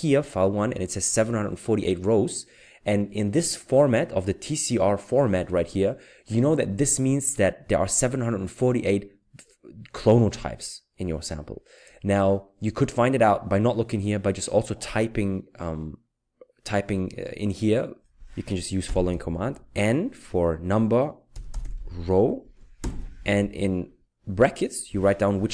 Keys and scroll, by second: 18.9 typing, 21.1-22.8 typing.